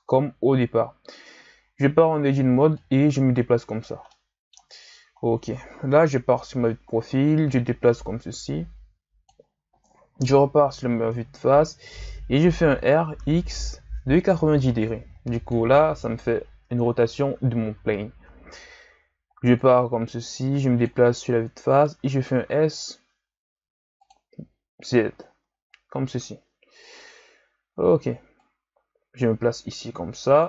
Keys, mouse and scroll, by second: 1.6 Tab, 2.8-4.1 drag, 4.1 middle click, 4.8-6.0 scroll down 5, 6.0 KP_3, 6.9 scroll down 2, 7.2-7.9 scroll up 2, 7.9-10.2 drag, 10.2 KP_1, 11.1-12.7 ctrl+scroll up 3, 12.7 r, 16.9-17.5 ctrl+scroll up 1, 17.5-19.5 shift+scroll up 2, 19.5-21.2 drag, 21.2-21.9 scroll up 2, 21.9 s, 25.1-27.0 shift+scroll up 3, 27.0 z, 28.5-30.4 drag.